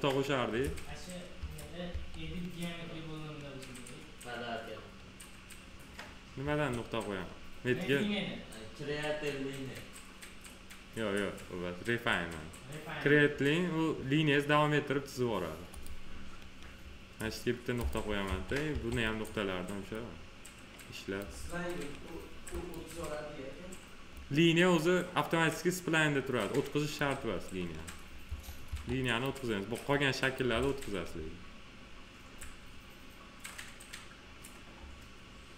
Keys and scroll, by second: 0.6 1, 6.4 1, 18.2 1, 28.2 1.